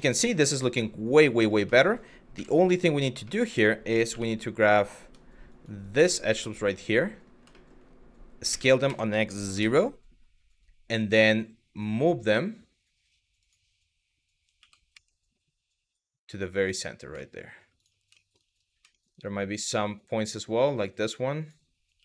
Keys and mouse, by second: 0.3 middle click, 0.9 click, 1.4 shift+middle click, 2.0 KP_1, 2.9 middle drag, 3.7 1, 4.7 Tab, 5.2 click, 5.6 click, 7.2 middle click, 8.1 s, 8.5 x, 9.2 KP_0, 10.5 click, 11.1 click, 13.0 click, 14.2 g, 14.6 x, 16.2 click, 16.9 shift+middle click, 17.4 click, 17.9 shift+middle click, 18.6 shift+middle click, 19.4 shift+middle click, 20.1 click, 20.9 click, 21.6 g, 21.9 x.